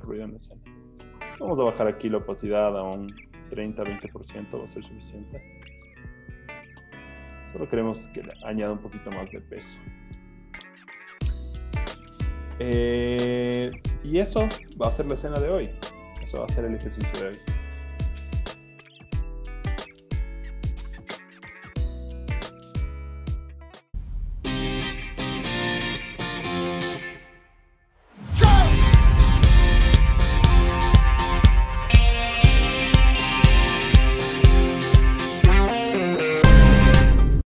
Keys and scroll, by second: 0.0-0.2 typing, 0.5 Page_Down, 1.8 typing, 3.3 ⍰, 5.4 Caps_Lock, 11.4 z, 14.8 super+s.